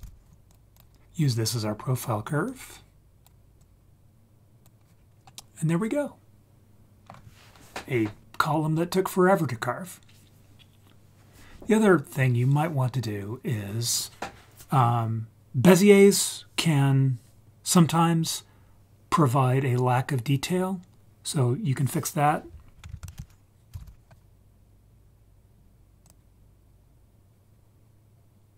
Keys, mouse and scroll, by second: 2.4-3.2 drag, 3.6-4.6 drag, 5.0 scroll down 4, 5.2-7.0 middle drag, 13.8 click, 23.0 shift+a.